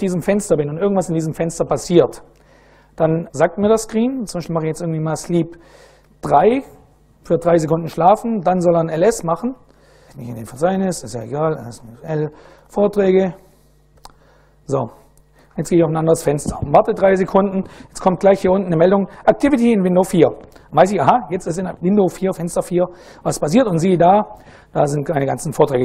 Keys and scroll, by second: 3.3 Return, 3.7-6.5 typing, 7.7-9.7 typing, 10.9-13.7 typing, 13.7 Tab, 14.9 Return, 15.4 a, 15.7 a, 22.1 ctrl+a, 22.6 4.